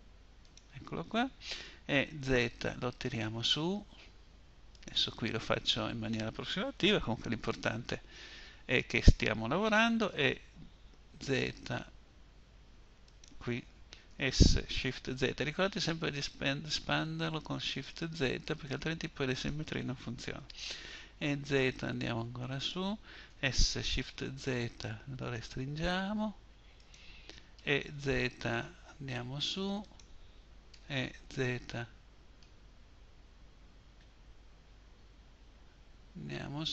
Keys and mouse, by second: 0.9 e, 9.3 e, 13.3 s, 19.7 e, 22.5 s, 26.8 e, 29.9 e.